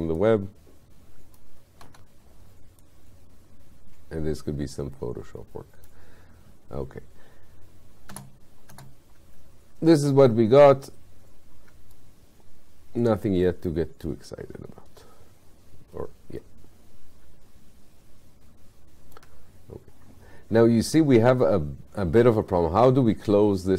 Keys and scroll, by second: 1.9 w, 8.1 space.